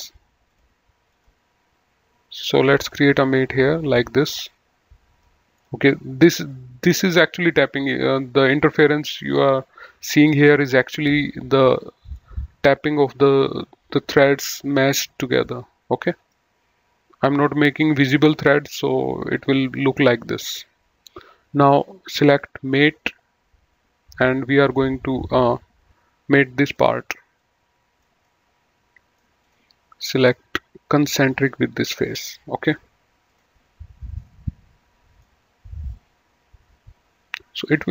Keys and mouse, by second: 0.5 click, 2.8 click, 7.8 middle click, 12.0 click, 15.4 middle click, 22.5 click, 24.6 click, 26.7 click, 28.2 middle click, 29.4 click, 31.1 click, 33.3 click, 34.1 middle click, 37.5 click.